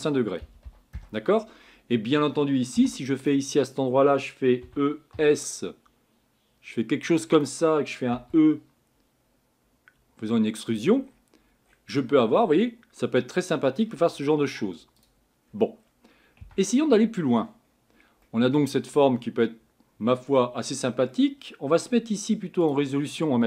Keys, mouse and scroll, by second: 1.0 click, 1.6-2.7 scroll up 7, 2.8 3, 3.2 click, 4.6 e, 8.1 e, 11.0-12.4 scroll down 14, 12.4-15.4 middle drag, 15.4 scroll up 4, 15.8-16.4 scroll down 3, 16.4 Tab, 17.3-18.3 scroll down 1, 18.3-23.4 middle drag.